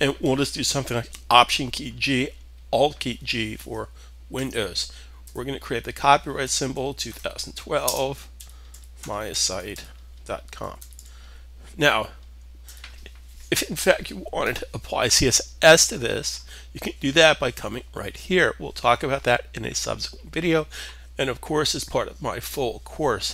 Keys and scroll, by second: 4.8 alt+g, 6.0-11.2 typing, 12.2 typing, 14.3-15.0 typing.